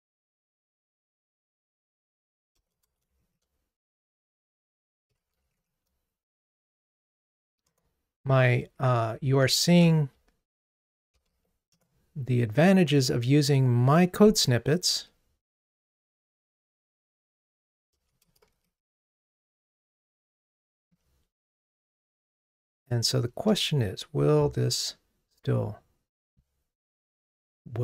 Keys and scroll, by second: 9.5 super+j, 11.9 Return, 19.3 Escape, 21.0 super+BackSpace, 23.4 super+BackSpace, 23.6 super+/.